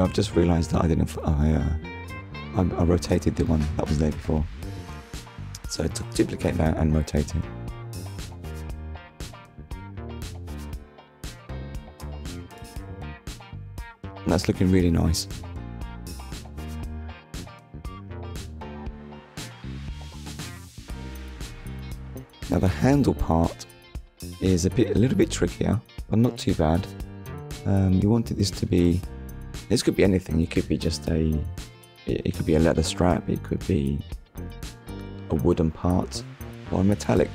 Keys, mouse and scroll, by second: 0.3 Return, 0.8 click, 1.2 middle click, 4.5 ctrl+s, 5.2 middle click, 8.4-8.8 scroll up 1, 9.2 shift+middle click, 9.7 middle click, 13.2 click, 14.6 click, 14.9 middle click, 17.2 shift+middle click, 18.5 click, 19.3 click, 20.7 click, 22.1 KP_Decimal, 23.8-24.2 scroll down 1, 25.2 middle click, 26.6 scroll down 1, 27.7 click, 28.1 shift+middle click, 29.9 shift+s, 32.2 click, 33.2 click, 34.0 ctrl+s, 37.0 middle click.